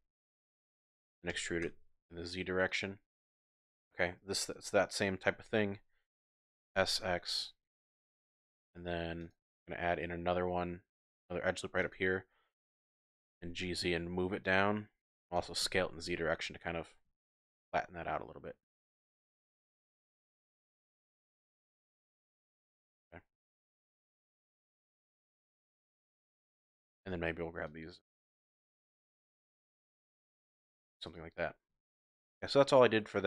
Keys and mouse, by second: 1.3 e, 1.6 z, 2.6 click, 3.2 shift+click, 6.5 s, 6.7 x, 7.7 click, 8.5 ctrl+r, 11.8 click, 12.7 g, 13.3 z, 14.4 click, 15.4 s, 15.6 z, 17.0 s, 17.2 z, 18.7 click, 19.9 g, 20.1 g, 21.1 click, 21.6 g, 22.5 click, 23.5 ctrl+r, 25.6 click, 26.9 1, 27.1 z, 27.7 click, 29.6 g, 29.8 z, 31.0 click, 31.7 z, 32.4-33.2 drag.